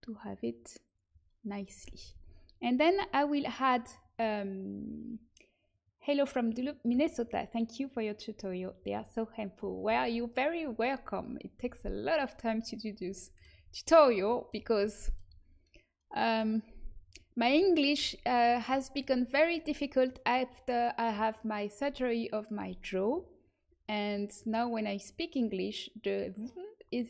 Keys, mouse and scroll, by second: 1.3 middle click, 2.0 a, 12.8-14.8 middle drag, 19.7-24.7 middle drag.